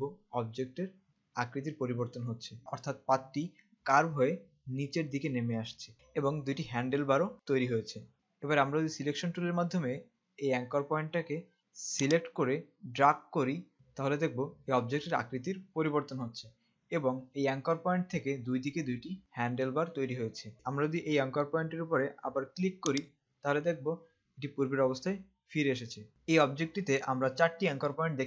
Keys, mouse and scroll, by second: 12.2 click, 13.3 click, 23.2 click.